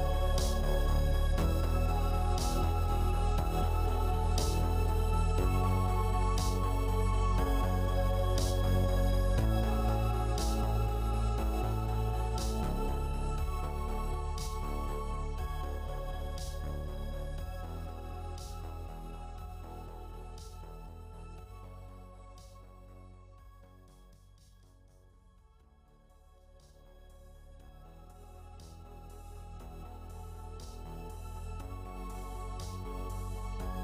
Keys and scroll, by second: 29.4 ctrl+j.